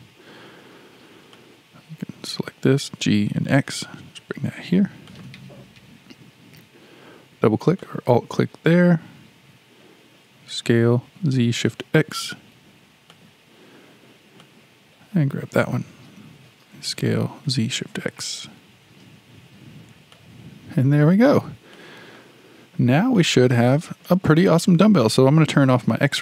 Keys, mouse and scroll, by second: 1.3 drag, 3.0 g, 7.6 click, 7.8 click, 10.3 s, 14.4 click, 16.7 s, 21.1-21.7 scroll down 4, 21.7 shift+middle click, 22.6-23.2 scroll down 5, 23.2-25.6 shift+middle drag, 25.6 alt+z.